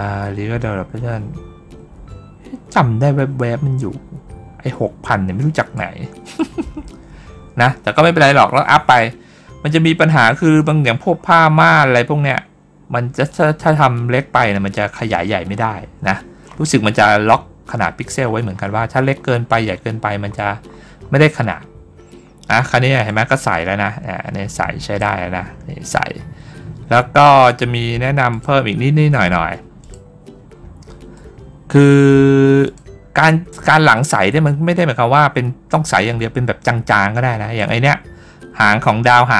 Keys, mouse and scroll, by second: 4.6-5.6 drag, 6.2-9.4 drag, 10.1 middle click, 10.7 middle click, 11.0 scroll up 2, 11.7 scroll up 2, 12.6 scroll down 2, 13.4 scroll up 2, 16.1 scroll down 2, 16.3-16.7 scroll up 4, 18.1-19.0 scroll down 2, 19.0 scroll down 1, 19.5 scroll down 1, 20.1-21.7 scroll down 1, 22.9-24.8 drag, 28.2 click, 29.7 click, 31.0-31.7 middle drag, 32.5 click.